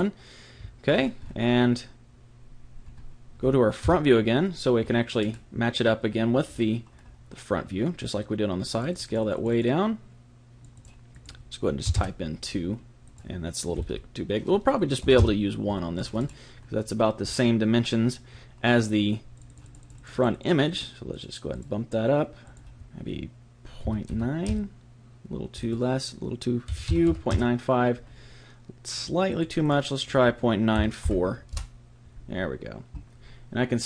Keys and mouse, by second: 0.9 click, 1.4 click, 1.7 middle click, 1.9-4.8 middle drag, 3.8 KP_1, 8.7-12.9 drag, 13.0 click, 16.0-19.4 middle drag, 19.4-24.2 drag, 25.6 click, 29.0 click.